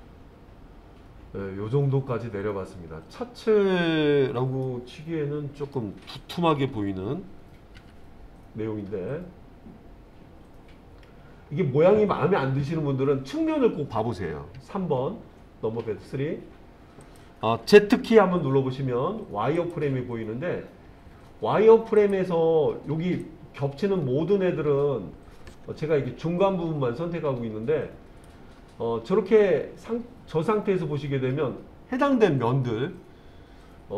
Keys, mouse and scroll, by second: 4.7-5.8 middle drag, 6.6 KP_1, 7.8 KP_3, 14.6 KP_3, 17.1 click, 18.4 z, 22.0 click, 23.3 click, 26.4 click, 30.5-33.9 middle drag.